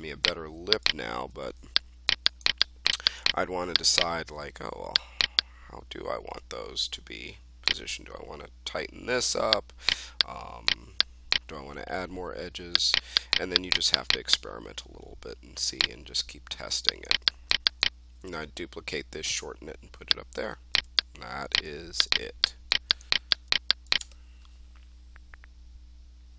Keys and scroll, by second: 1.2 1.